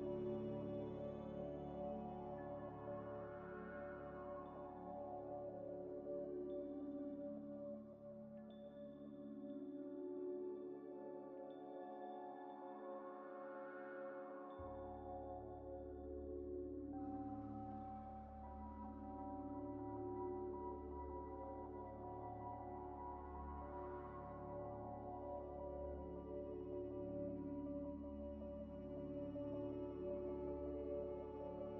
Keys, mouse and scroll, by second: 0.2 shift+click, 0.7 shift+click, 0.9 ctrl+-, 2.7 ctrl+-, 2.9 shift+click, 3.3 g, 3.4 x, 6.0-6.6 ctrl+z, 8.0 double click, 10.6 double click, 12.3 shift+click, 12.7 shift+click, 13.2 ctrl+-, 14.3 double click, 14.7 Delete, 15.0 Delete, 15.6 ctrl+z, 16.4 Delete, 19.7 double click, 20.9 shift+click, 21.6 x, 27.1 s, 28.2 ctrl+z, 28.9 g, 29.0 y, 30.4 x, 30.6 y.